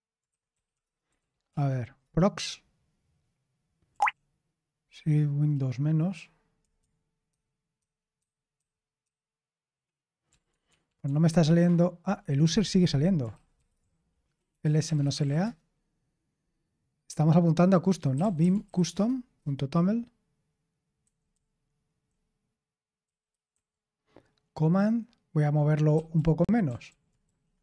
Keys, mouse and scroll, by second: 0.0-1.2 typing, 1.5 ctrl+p, 2.0 Return, 3.9 l, 7.3 ctrl+_, 7.8 ctrl+_, 8.2 ctrl+_, 8.5 ctrl+_, 10.3 ctrl+*, 10.5 ctrl+*, 13.3-15.7 typing, 17.9-19.4 typing, 21.0-23.5 typing, 25.7-27.6 typing.